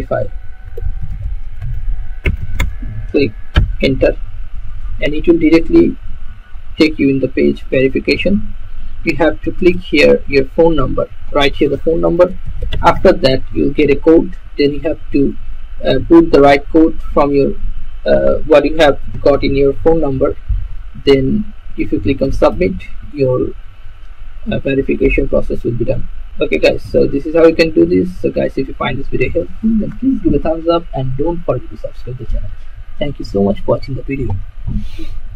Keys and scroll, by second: 0.0-3.5 typing, 3.9 Return, 12.2-14.0 typing.